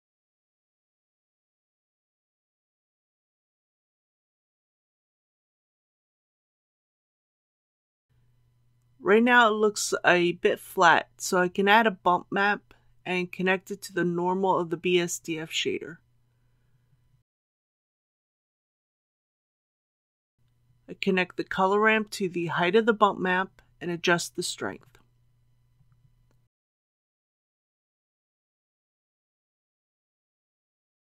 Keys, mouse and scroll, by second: 2.8 KP_8, 10.0 shift+a, 12.5-25.2 drag, 28.0 KP_Decimal, 28.2 KP_1, 28.4 KP_2, 30.9 middle click.